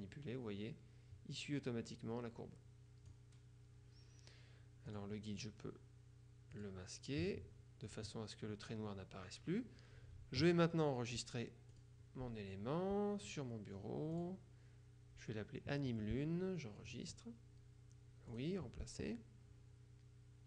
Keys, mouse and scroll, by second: 5.0 click, 6.6 click, 8.0 click, 11.8 click, 13.4 click, 14.2 click, 17.0 click, 18.4 click.